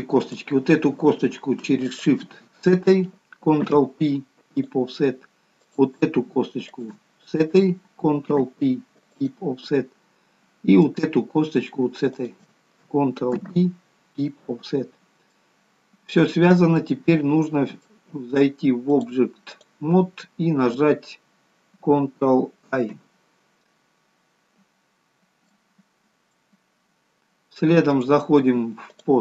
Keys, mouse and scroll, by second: 0.2 click, 1.9 shift+click, 3.7 ctrl+p, 5.7 click, 6.8 shift+click, 8.2 ctrl+p, 10.9 click, 12.1 shift+click, 13.4 ctrl+p, 15.1-15.5 scroll up 1, 15.5 middle click, 16.6-17.0 scroll down 2, 16.9 middle click, 19.0 click, 25.1-25.6 scroll up 2, 25.6 middle click, 27.9 click.